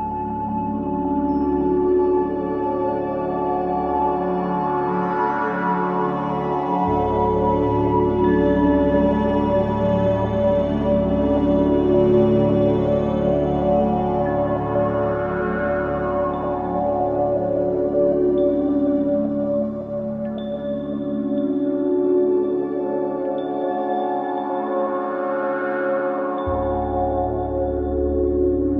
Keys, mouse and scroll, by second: 0.2 ctrl+z, 1.3 click, 2.9 alt+click, 3.4 alt+right click, 3.7 alt+click, 4.6 ctrl+z, 5.1-6.2 scroll up 1, 6.2 click, 10.9 alt+click, 11.9 ctrl+z, 12.6 click, 14.1 alt+click, 14.8 ctrl+z, 17.5 click, 18.9 alt+click, 19.3 ctrl+z, 20.2 ctrl+z, 20.5 click, 21.4 scroll down 1, 21.5-22.0 scroll up 1, 26.3 click, 26.4 click, 27.0 scroll down 1, 27.3-27.9 scroll up 1.